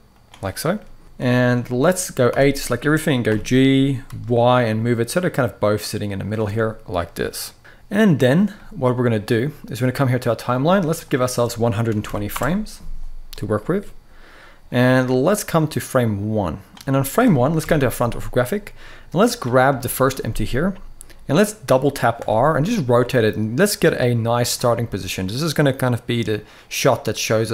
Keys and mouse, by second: 1.0-1.4 shift+middle drag, 2.0 a, 3.0 g, 3.8 x, 7.6 middle click, 8.2-8.9 middle drag, 9.8 click, 10.8-12.1 drag, 13.0 middle click, 15.0 middle click, 15.9 click, 16.6 middle click, 17.3 KP_1, 19.6 shift+middle click, 21.9 r, 22.0 r, 24.4 r.